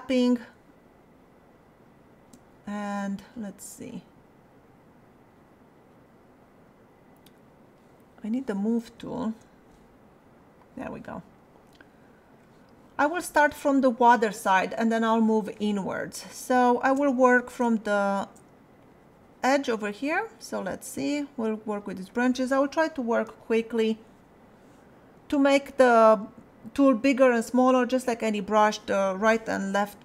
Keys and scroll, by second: 2.0 space, 9.0 space, 23.3 ], 25.9 ].